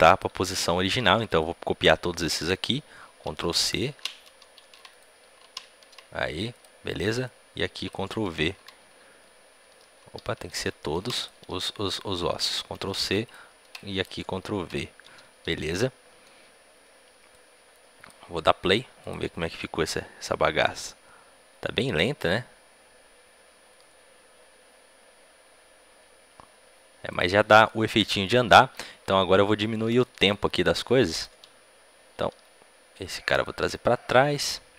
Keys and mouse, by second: 0.0-4.8 drag, 4.8 ctrl+c, 6.4 click, 7.9 ctrl+v, 9.4 ctrl+z, 11.2 ctrl+a, 13.1 ctrl+c, 14.0 ctrl+v, 17.2-27.0 drag, 27.0-32.2 drag, 32.2 a, 32.2 b, 32.2 g.